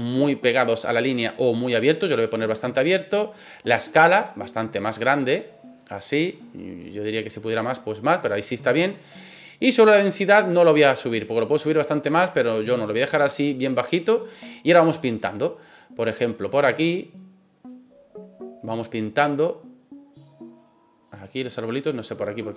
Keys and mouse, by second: 3.6-5.4 drag, 7.2-8.6 middle drag, 10.9-14.1 drag, 22.2-22.5 middle drag.